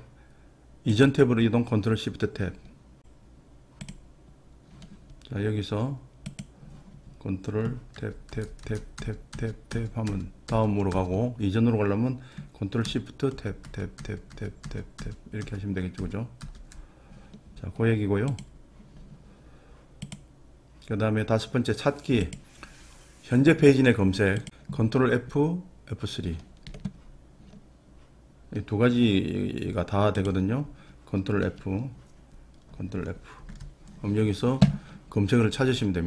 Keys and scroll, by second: 8.1 ctrl+Tab, 8.4 ctrl+Tab, 8.7 ctrl+Tab, 9.0 ctrl+Tab, 9.4 ctrl+Tab, 9.8 ctrl+Tab, 10.1 ctrl+Tab, 10.5 ctrl+Tab, 11.0 ctrl+Tab, 13.4 ctrl+shift+Tab, 13.7 ctrl+shift+Tab, 14.1 ctrl+shift+Tab, 14.4 ctrl+shift+Tab, 14.7 ctrl+shift+Tab, 15.1 ctrl+shift+Tab, 15.5 ctrl+shift+Tab, 16.0 ctrl+shift+Tab, 16.6 ctrl+shift+Tab, 33.5 ctrl+f.